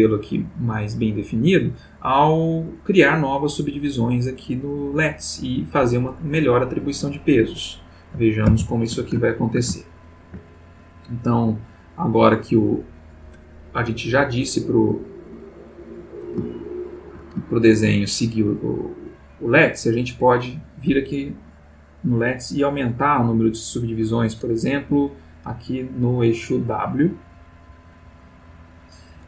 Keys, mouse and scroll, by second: 0.2 click, 8.5 alt+r, 9.3-10.5 ctrl+alt+middle drag, 12.8 click, 15.8-16.3 drag, 16.5-17.3 shift+middle drag, 17.5-18.0 ctrl+shift+middle drag, 18.9 click, 19.8 click, 22.0 click, 23.6-25.5 drag, 24.8 Escape, 26.0-28.9 drag.